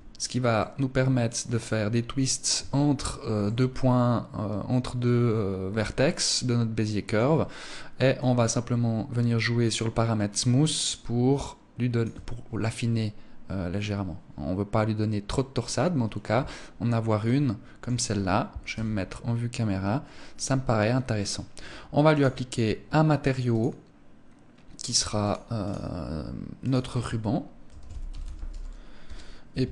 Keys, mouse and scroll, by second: 0.0 middle click, 2.1 Tab, 2.9 middle click, 7.6 click, 11.6 Tab, 12.2 middle click, 18.2 KP_0, 21.6 click, 23.0 click, 25.1 click, 26.1 click.